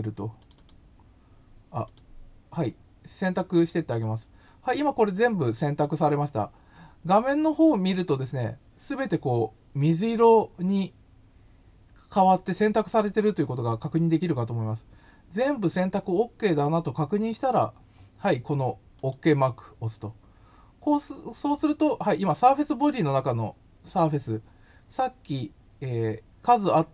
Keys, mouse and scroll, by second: 0.3 click, 0.5 click, 1.8 click, 8.1-13.0 middle drag, 18.9 click.